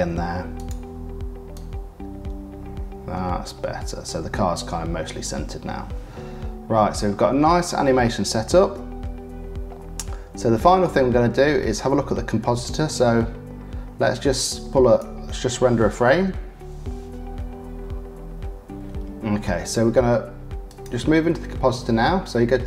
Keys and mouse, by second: 0.0 i, 5.9-8.0 drag, 12.3-14.9 drag, 16.3 F12.